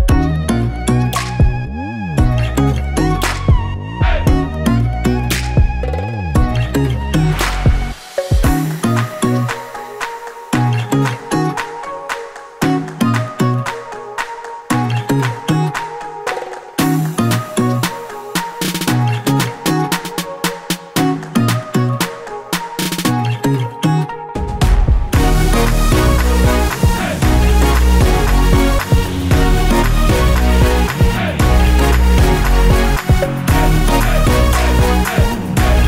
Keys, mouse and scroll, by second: 3.8 click, 5.5 scroll up 1, 6.7-9.5 middle drag, 7.2 scroll down 1, 8.6-9.5 scroll up 1, 9.5 click, 10.2-11.5 drag, 11.5-12.0 scroll up 1, 12.0-22.4 drag, 13.8 KP_0, 14.0 Return, 16.9 KP_0, 17.0 Return, 19.6-22.2 scroll down 1, 23.0-23.8 scroll down 1, 23.9 click, 24.9-25.9 drag, 27.0-27.7 scroll down 2, 27.7-35.8 drag, 33.4-34.0 scroll down 2, 34.0 scroll down 1.